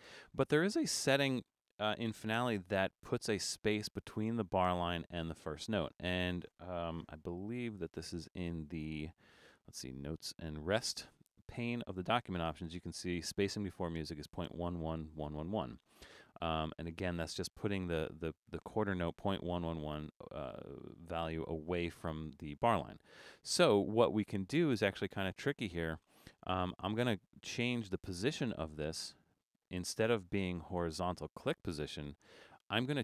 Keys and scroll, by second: 1.9 BackSpace, 7.3 alt+super+a.